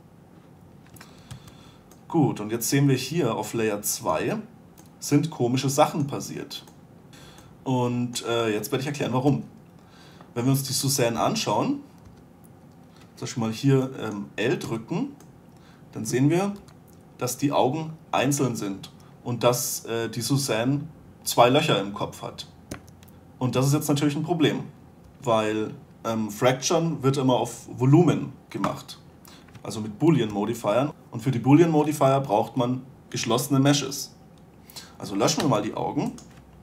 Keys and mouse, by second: 1.6 2, 7.8-9.6 middle drag, 9.6 1, 11.5 Tab, 12.4 a, 14.9 l, 15.0 middle click, 16.9 g, 25.3 a, 29.0 l, 30.6 a, 30.9 l, 35.7 Delete.